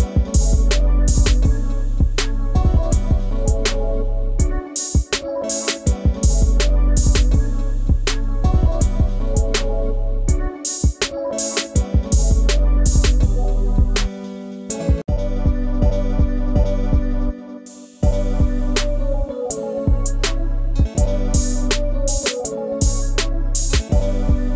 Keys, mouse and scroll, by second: 3.5-3.9 scroll down 1, 5.0-5.6 scroll up 1, 8.5 BackSpace, 8.8 0, 14.6 alt+click, 16.0 double click, 17.2 BackSpace, 20.1 scroll up 1, 20.3 ctrl+space, 20.3 ctrl+click, 20.6 ctrl+space, 20.8 ctrl+scroll, 20.9 scroll down 1, 22.1 right click, 24.2 space, 24.3 ctrl+click.